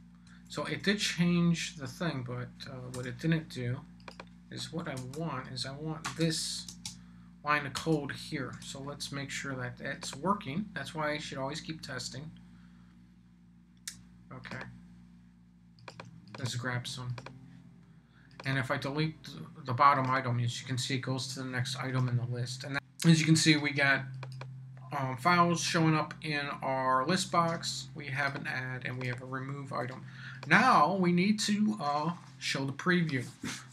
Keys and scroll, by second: 0.2 BackSpace, 2.9 Return, 4.9 Return, 5.4 super+Return, 6.0 super+v, 6.7 super+space, 7.7 Return, 8.5 super+s.